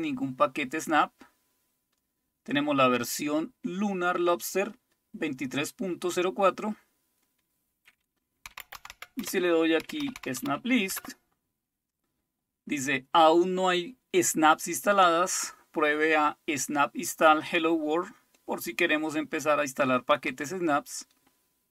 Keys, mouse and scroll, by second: 8.3-10.9 typing, 18.4-19.2 scroll up 2, 19.2-20.4 scroll down 2.